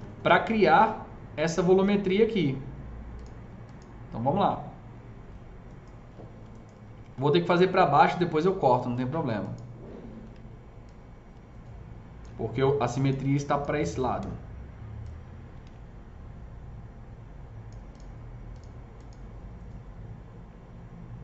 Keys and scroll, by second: 14.1 s.